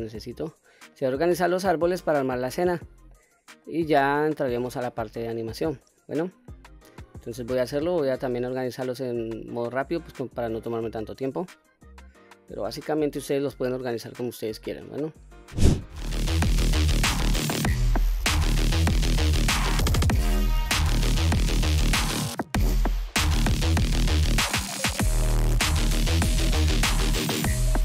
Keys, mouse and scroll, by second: 0.2-1.3 middle drag, 2.1-3.5 scroll down 1, 3.5-4.0 middle drag, 4.4-4.9 scroll down 2, 4.8-5.7 scroll up 3, 5.7-6.2 middle drag, 8.1-8.4 middle drag, 8.6-9.5 scroll down 1, 9.5-9.9 scroll down 1, 9.9-10.3 middle drag, 10.6-11.0 scroll down 1, 11.0-11.6 scroll up 2, 11.7-12.2 scroll down 1, 12.2-13.1 middle drag, 14.7 scroll down 1, 15.3 middle click, 15.6 middle click, 16.9 middle click, 16.9-17.6 typing, 17.0 click, 17.0 scroll down 2, 17.1 scroll up 2, 17.5 middle click, 17.8 click, 17.8 middle click, 17.9 click, 18.0 middle click, 18.0 click, 18.2 click, 18.2 middle click, 18.2 scroll up 1, 18.3 click, 18.5 click, 18.6 click, 18.7 middle click, 18.8-24.7 typing, 18.9 click, 19.0 click, 19.1 scroll down 2, 19.7 click, 20.2 middle click, 20.2 scroll down 1, 20.3 scroll up 1, 20.4 scroll down 1, 20.5 shift+scroll down 1, 20.6 shift+click, 20.9 click, 21.0 shift+middle click, 21.0 click, 21.5 shift+middle click, 21.5 scroll down 1, 21.6 scroll up 3, 21.6 scroll down 1, 21.8 click, 22.9 shift+click, 23.2 middle click, 23.2 scroll up 3, 23.4 middle click, 23.6 click, 24.1 scroll down 2, 24.1 middle click, 24.2 scroll up 1, 24.2 middle click, 24.5 middle click, 24.8 click, 24.8 scroll down 1, 25.0 shift+click, 25.2 shift+click, 25.4 shift+click, 25.6 shift+click, 25.8-27.8 typing, 26.3 click, 26.4 ctrl+z, 26.6 click, 26.8 ctrl+z, 27.2 click, 27.4 middle click, 27.5 scroll up 2, 27.6 shift+middle click.